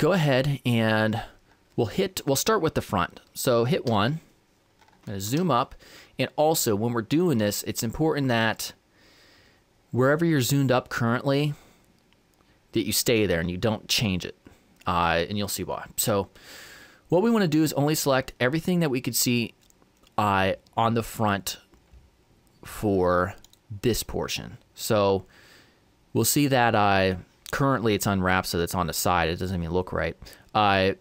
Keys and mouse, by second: 3.9 KP_1, 5.9-11.6 middle drag, 11.9-17.0 middle drag, 23.5-25.3 right drag, 25.3-31.0 middle drag.